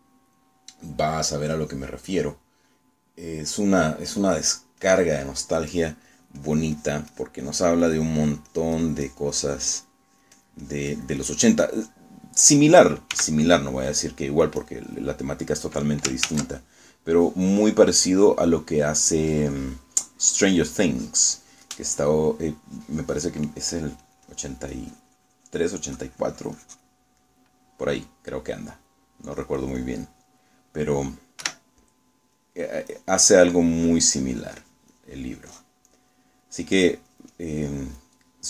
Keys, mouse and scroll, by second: 5.5 click, 7.2-8.2 drag, 8.9 click, 9.3-12.6 drag, 12.8 middle click, 13.6 middle click, 14.2 s, 15.7 click, 17.4 ctrl+z, 19.4 middle click, 21.0-24.3 drag, 25.1-26.8 drag, 28.3 middle click, 29.0 middle click, 30.4 click, 32.5 4, 33.5-37.4 drag, 37.8-38.4 drag.